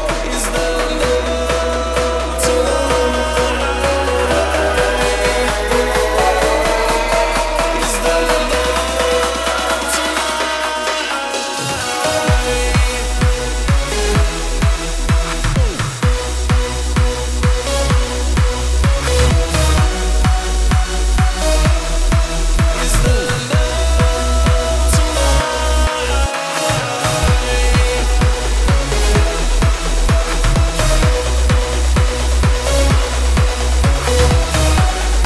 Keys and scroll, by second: 5.4 shift+Tab, 31.5 a, 35.0 super+c.